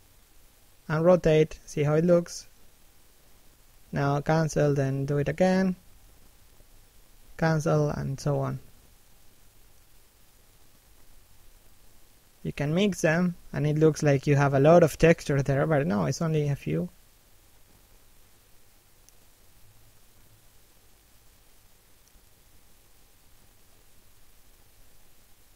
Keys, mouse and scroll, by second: 1.6 shift+click, 6.7 middle click, 7.2 shift+middle click, 7.7 middle click, 8.8 shift+click, 11.8 middle click, 12.3 shift+middle click, 13.7 click, 17.1 middle click, 17.8 middle click, 18.2 shift+middle click, 19.1 shift+click, 22.4-22.8 scroll up 1, 22.8 shift+click.